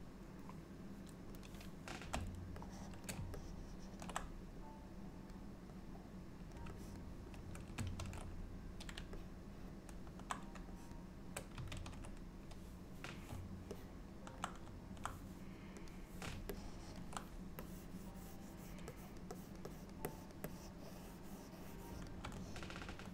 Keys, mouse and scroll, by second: 1.5 click, 2.7 shift+middle click, 3.5 ctrl+middle click, 4.7 click, 5.8 click, 6.9 shift+click, 7.3 shift+click, 8.1 ctrl+z, 9.2 middle click, 10.9 shift+click, 11.8 ctrl+z, 13.8 middle click, 16.0 click, 16.6 ctrl+middle click, 17.7 click, 19.0 click, 19.4 click, 19.8 click, 20.2 click, 20.5 click, 22.5 middle click.